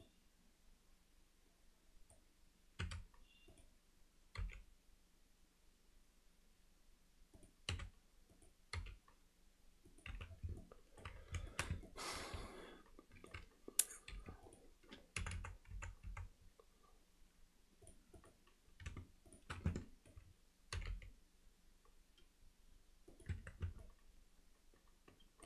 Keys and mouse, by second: 0.1-2.2 drag, 2.8 r, 4.4 g, 7.7 r, 8.8 g, 10.1 z, 10.6 alt+middle click, 11.5 shift+middle click, 11.9 ctrl+alt+middle click, 12.5 alt+middle click, 14.1 2, 15.3 f, 15.4 f, 15.8 f, 16.1 f, 18.2 click, 19.7 alt+middle click, 20.8 g, 23.4 Tab, 23.8-25.4 middle drag.